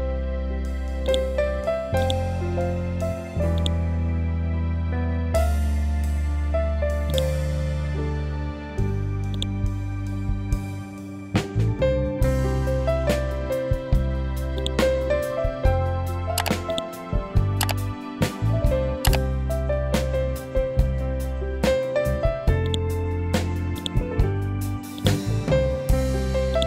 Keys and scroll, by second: 0.1 ctrl+End, 5.9 ctrl+u, 10.6 Delete, 15.9 Delete, 18.7 ctrl+g, 24.4 r.